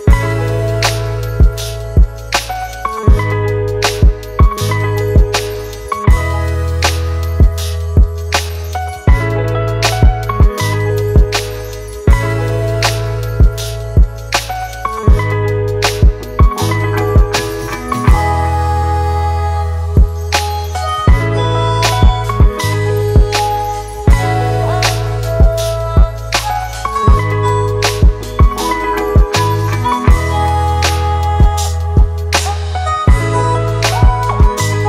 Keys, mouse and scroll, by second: 4.4 alt+shift+click, 10.5 Return, 30.0 ctrl+t, 31.1 alt+shift+click.